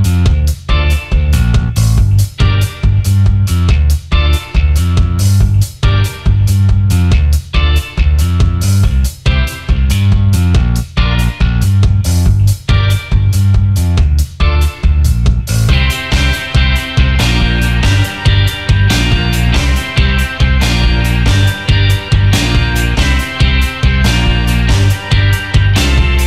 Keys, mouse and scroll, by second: 0.5 shift+click, 2.0 alt+scroll down 1, 2.3 alt+scroll up 1, 3.0 alt+scroll down 1, 5.0 alt+shift+click, 9.2 double click, 9.6 alt+scroll up 1, 14.5 double click, 14.8 alt+scroll down 1, 15.5 alt+scroll down 1, 19.1 ctrl+8, 20.0 alt+scroll up 1, 20.3 alt+click, 23.6-25.6 scroll up 1, 25.7 alt+scroll down 1.